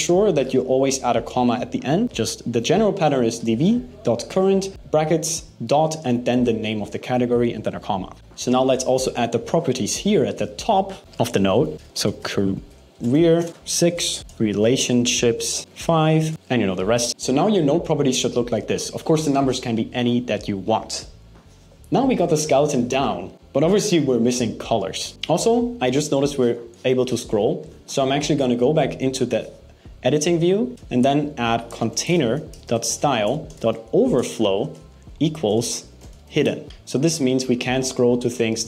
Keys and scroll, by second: 12.3 BackSpace, 13.1 shift+space, 14.2 BackSpace, 15.6 shift+space, 34.7 shift+=, 35.2 shift+space, 36.6 Right, 36.6 shift+;.